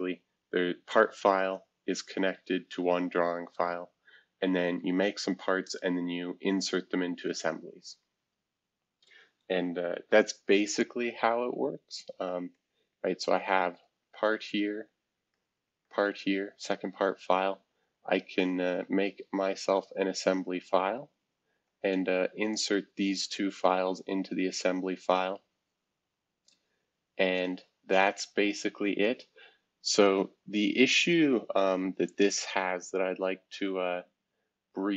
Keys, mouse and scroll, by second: 0.0-1.0 drag, 1.1 click, 2.1 click, 5.9 click, 6.5 click, 7.4 click, 8.0 click, 12.5 click, 12.9 click, 13.6 click, 14.0 click, 14.9 click, 15.3 click, 15.8 click, 16.3 click, 18.7 click, 19.0 click, 19.8 click, 20.2 click, 20.5 click, 20.8 click, 21.6-25.5 drag, 27.4 click, 31.9-33.6 drag.